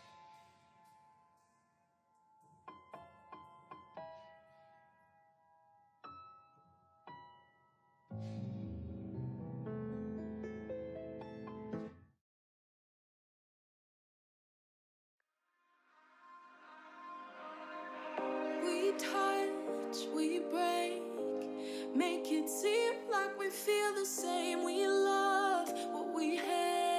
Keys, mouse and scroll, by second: 0.0 3, 0.3 middle click, 0.9 click, 1.5 3, 1.7 click, 2.0 alt+z, 2.6 click, 3.2 shift+middle click, 3.6 g, 5.1 scroll down 1, 5.3 middle click, 5.6 2, 6.0 alt+click, 6.5 f, 6.7 shift+middle click, 7.2 alt+click, 7.6 f, 8.0 click, 8.6 3, 8.9 shift+click, 9.2 shift+click, 9.6-10.8 shift+middle drag, 10.8 g, 12.0 middle click, 12.5 KP_3, 13.2 click, 13.7 shift+click, 13.9 scroll down 1, 14.0-14.6 middle drag, 14.6 g, 16.1 ctrl+z, 16.2 ctrl+z, 16.4 ctrl+z, 16.7 scroll down 1, 16.7 middle click, 16.9-17.5 scroll up 2, 17.0 middle click, 17.5 g, 18.8 click, 19.2 shift+click, 19.5 g, 20.7 scroll down 4, 20.9 click, 20.9 middle click, 21.2 Tab, 21.5 click, 21.5 shift+middle click, 21.7 scroll down 1, 22.0-22.8 drag, 22.0 middle click, 22.8 shift+c, 23.1-23.6 drag, 23.6 shift+middle click, 23.8-25.2 scroll up 1.